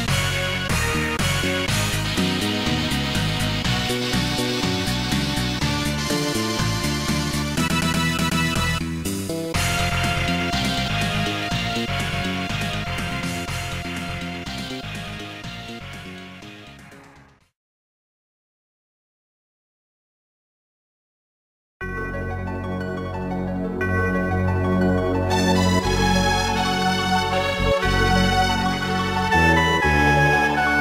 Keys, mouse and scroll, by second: 0.5 right click, 1.5 right click, 3.8 right click, 6.3 right click, 8.3 right click, 11.4 scroll down 1, 12.3-13.2 typing, 14.0 scroll up 2, 14.8 right click, 15.6 right click, 15.6 shift+double right click, 15.8 right click, 16.1 right click, 16.2 shift+double right click, 16.3 right click, 17.2 middle click, 17.5-18.0 scroll down 2, 18.6-19.6 typing, 21.0 scroll up 1, 21.6 right click, 22.3 right click, 22.7 right click, 23.0 right click, 23.3 right click, 24.3 right click, 25.0 right click, 26.4 right click, 28.0 right click, 28.4 right click, 29.6 scroll down 2, 29.8 ctrl+s, 30.0 click, 30.7-30.8 typing.